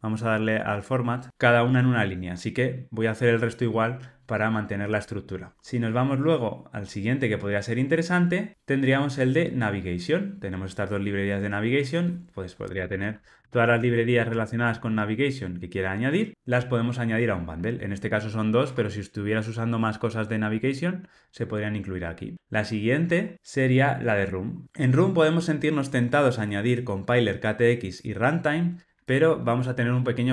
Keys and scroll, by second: 18.5 Tab.